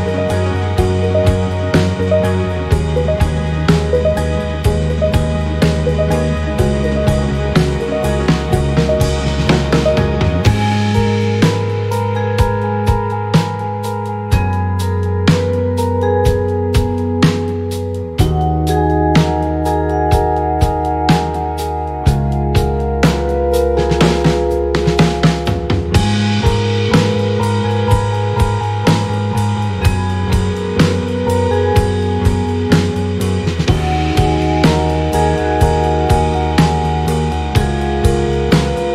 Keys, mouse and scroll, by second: 0.2-0.5 ctrl+shift+scroll down 3, 2.0 click, 3.4 ctrl+d, 4.0-4.5 ctrl+scroll up 3, 5.7 ctrl+shift+click, 7.2-8.7 ctrl+drag, 9.3 click, 10.9 click, 11.3 click, 12.2 click, 13.3 click, 15.1 click, 16.3 click, 17.3 KP_5, 19.0 click, 21.6 click, 22.4 click, 24.4 ctrl+d, 26.0 click, 26.9 ctrl+scroll up 1, 27.8-29.6 ctrl+shift+drag, 30.1-31.4 ctrl+drag, 32.5-36.4 ctrl+shift+drag, 37.0 click, 37.6 click, 38.5 shift+Right.